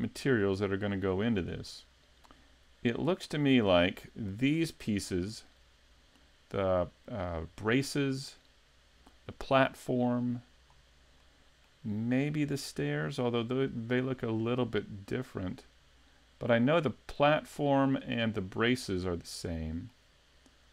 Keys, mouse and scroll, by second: 0.5-0.8 scroll up 2, 0.9 middle click, 2.5-3.0 scroll down 1, 3.0 middle click, 10.7-11.2 scroll up 3, 11.2 middle click, 12.9-13.7 scroll down 3, 13.7 middle click, 19.5 middle click.